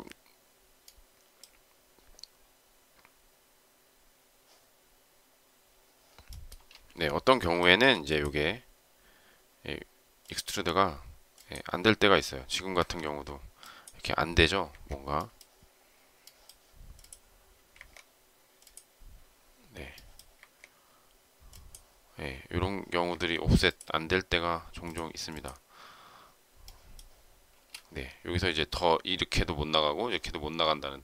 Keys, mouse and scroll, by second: 6.5 space, 7.8 p, 12.7 Escape, 14.6 Escape, 17.7 Escape, 20.3 Escape, 23.0 Escape, 27.5 space.